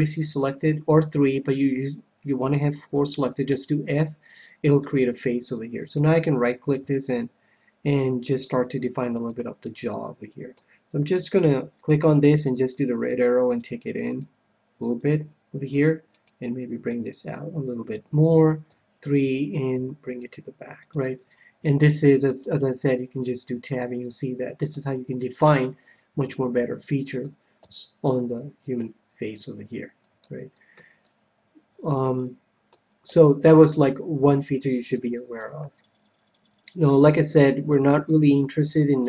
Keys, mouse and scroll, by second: 3.5 f, 5.8-7.6 right drag, 6.7 g, 7.8 g, 8.4-10.0 drag, 9.1-10.7 right drag, 9.6-11.1 middle drag, 11.1-13.1 right drag, 12.6-14.4 drag, 14.0-15.8 right drag, 14.9-16.4 drag, 16.1-17.8 right drag, 17.0-18.3 drag, 18.6 KP_3, 19.7 g, 20.6 g, 20.9-22.4 drag, 21.7-24.5 middle drag, 22.4 Tab, 24.9 Tab, 25.2-27.0 middle drag, 27.5 KP_3, 30.2-32.5 middle drag, 32.6 middle click, 33.0 a, 34.2 KP_3, 34.9-36.6 middle drag, 37.4-39.0 middle drag.